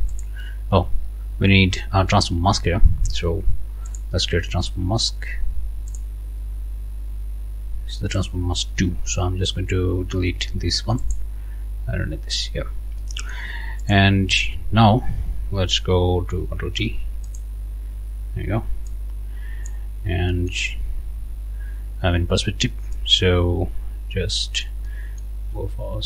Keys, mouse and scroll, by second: 0.1 click, 3.9 click, 5.9 click, 8.2 click, 11.0 click, 12.6 scroll down 2, 13.0 click, 13.8 click, 16.8 ctrl+t, 17.3 ctrl+click, 22.9-24.8 drag, 24.9 click.